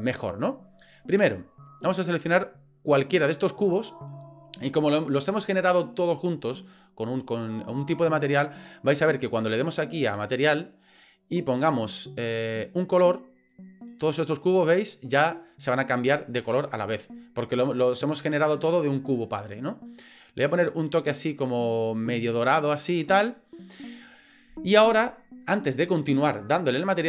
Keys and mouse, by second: 1.8 click, 10.3 click, 12.6 click.